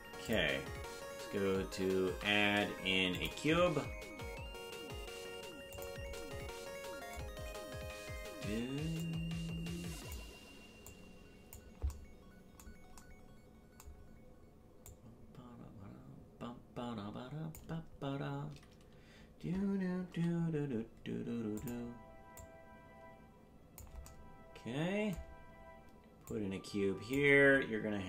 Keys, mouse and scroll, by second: 0.2 click, 2.0 shift+a, 4.1 s, 9.0-10.2 drag, 10.8 click, 14.8-17.6 drag, 20.1 s, 22.4-23.8 drag, 26.3 click.